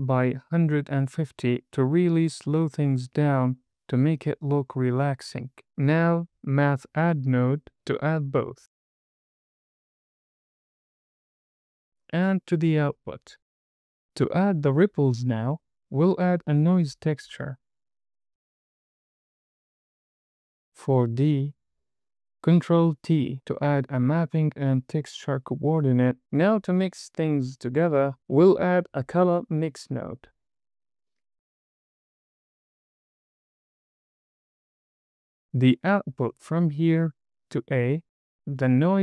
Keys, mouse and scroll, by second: 3.2 g, 5.1 click, 6.1 drag, 7.7 d, 10.5 drag, 11.8 drag, 14.5 shift+a, 19.5 click, 20.0 middle click, 20.3 scroll up 2, 20.9-21.9 drag, 22.8 ctrl+t, 24.1 g, 25.6 click, 28.1 shift+a, 33.6 click, 34.2 click, 35.3 scroll up 1, 35.4 click, 36.6 drag.